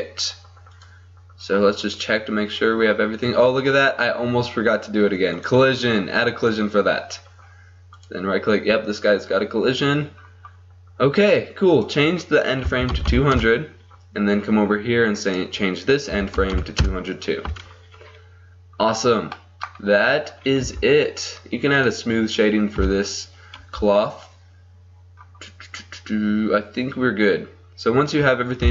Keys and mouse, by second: 0.8-3.5 drag, 1.8-3.5 right drag, 4.4-5.4 middle drag, 5.4-7.2 drag, 8.1-13.2 drag, 13.2 KP_0, 16.6 KP_0, 19.8 middle click, 20.7 t, 21.9-23.7 drag, 22.9 t, 26.4-28.7 middle drag.